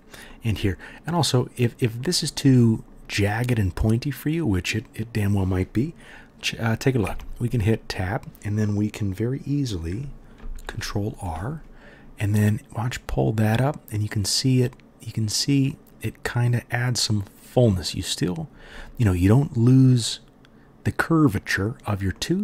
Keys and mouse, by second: 7.0 Tab, 10.4 ctrl+r.